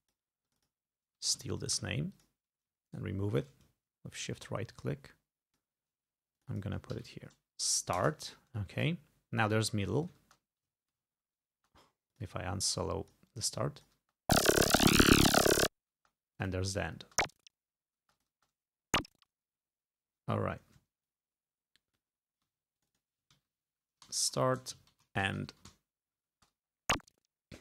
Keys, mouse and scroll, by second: 0.5 click, 1.8 ctrl+c, 2.2 ctrl+click, 2.9 shift+right click, 4.3-5.8 drag, 6.4 click, 7.0 ctrl+v, 8.1 Return, 9.5 click, 10.0-10.7 ctrl+scroll down 4, 10.3 ctrl+space, 10.8 ctrl+scroll up 2, 11.7 ctrl+space, 12.2 ctrl+click, 12.8-14.1 drag, 14.1 space, 14.7 scroll up 2, 16.1 space, 16.4 click, 17.1 space, 18.1 space, 18.2 click, 20.1 space, 21.1-22.2 ctrl+drag, 22.8 ctrl+click, 23.4 ctrl+v, 24.1-26.3 typing.